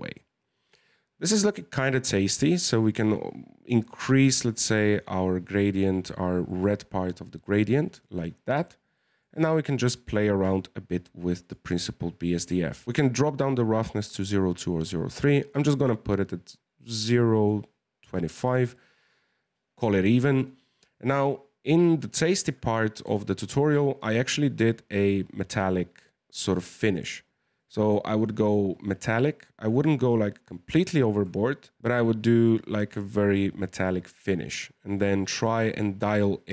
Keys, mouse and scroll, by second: 1.3-2.5 middle drag, 2.5-5.6 drag, 8.2-11.4 middle drag, 11.4-12.8 drag, 14.9-17.9 drag, 21.3-23.0 scroll up 1, 23.1-24.6 shift+middle drag, 24.6-30.5 drag, 31.8-34.5 drag, 34.9-36.5 drag.